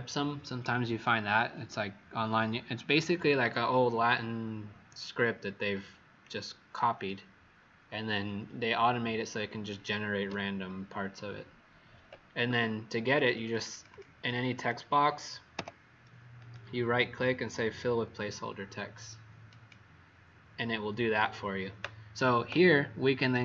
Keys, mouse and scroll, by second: 12.4 Escape, 12.4 `, 13.1 click, 13.2 click, 15.5 Delete, 16.3 right click, 19.6 click.